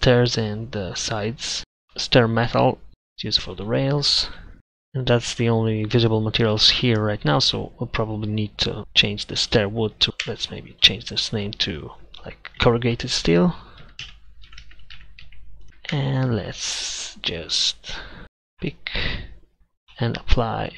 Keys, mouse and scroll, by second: 10.1 Tab, 10.3 Tab, 16.0 Tab, 18.2-19.5 middle drag, 19.9 ctrl+KP_Add.